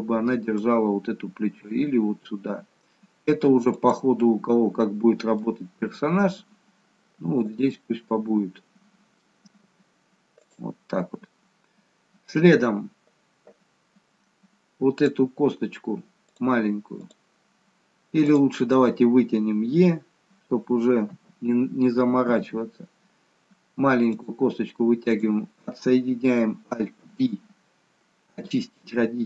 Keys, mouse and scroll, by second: 1.4 g, 4.3 middle click, 6.1 g, 7.7 middle click, 7.7-8.7 scroll up 1, 9.8 g, 13.9-15.0 scroll down 1, 15.0 click, 15.0-16.3 scroll down 1, 16.3 click, 18.3 click, 21.1 KP_3, 22.3 e, 25.1 click, 27.0 alt+p.